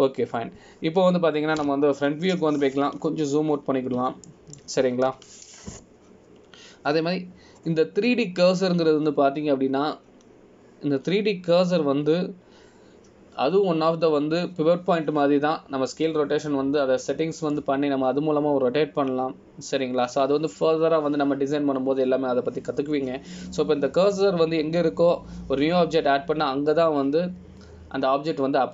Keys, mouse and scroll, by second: 0.7 click, 3.8 KP_1, 4.9-5.8 scroll down 4, 5.8-6.1 scroll up 1, 6.4 shift+middle click, 7.2 n.